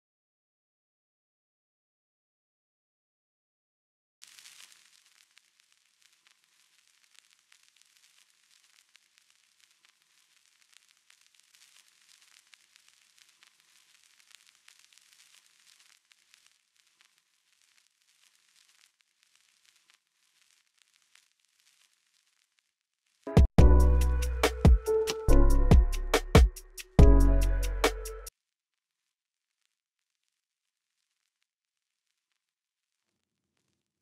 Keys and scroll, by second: 0.9-2.3 typing, 1.2 Return, 4.0 space, 6.3 x, 17.8 v, 18.2 v, 19.4 x, 23.1 typing, 28.1 s, 28.4 v.